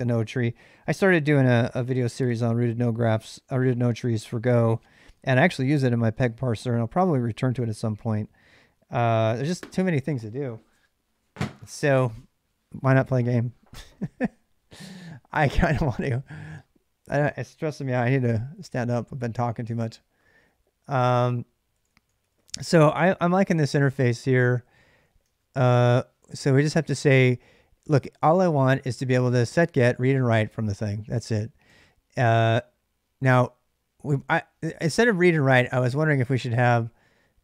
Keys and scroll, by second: 21.3-27.0 typing, 29.1 j, 29.4 j, 29.7 j, 31.5 k, 34.6 l.